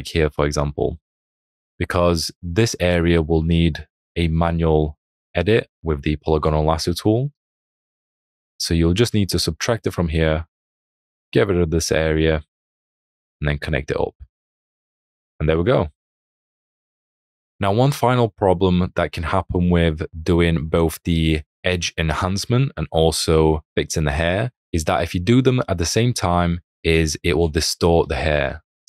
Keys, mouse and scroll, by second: 8.0 alt+click, 12.5 ctrl+click, 14.9 alt+scroll.